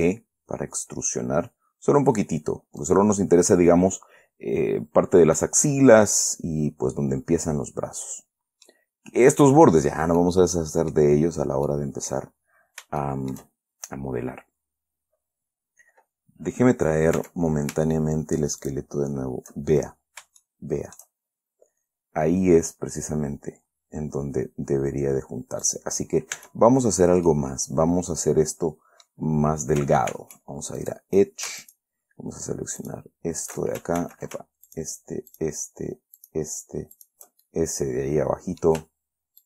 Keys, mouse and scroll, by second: 3.2 click, 4.4-4.7 scroll up 2, 4.9 scroll down 2, 5.7-9.2 middle drag, 9.3 scroll up 2, 10.0-10.5 scroll down 4, 10.5-11.6 middle drag, 11.6 scroll up 2, 12.0 middle click, 12.7-13.2 scroll down 2, 13.3 shift+middle click, 14.0-14.3 shift+scroll up 3, 15.3 scroll down 2, 17.5 Tab, 19.0 shift+click, 20.1-20.7 shift+scroll up 4, 20.7 shift+click, 22.3-22.8 scroll up 2, 26.0 right click, 26.7 Tab, 27.2 scroll down 1, 27.6-29.6 middle drag, 30.5 ctrl+Tab, 31.1 ctrl+click, 32.0 alt+shift+right click, 33.1 alt+shift+right click, 34.3 ctrl+alt+shift+z, 35.0 ctrl+shift+right click, 35.7 shift+right click, 36.5 shift+right click, 37.3 shift+right click, 37.8-38.7 scroll down 2, 38.7-39.1 scroll down 1.